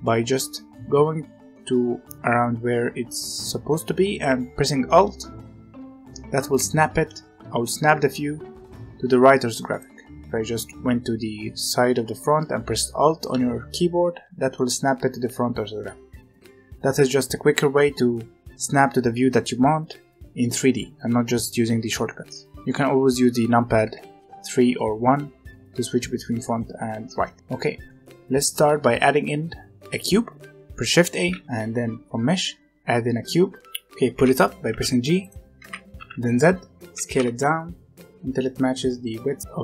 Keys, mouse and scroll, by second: 0.0-2.2 middle drag, 9.8-12.8 middle drag, 13.5 right click, 23.8 KP_1, 24.1 KP_3, 24.7 KP_1, 26.8-27.3 scroll up 3, 27.3-30.8 shift+middle drag, 31.2 shift+a, 35.2 click, 35.5 g, 37.1 s.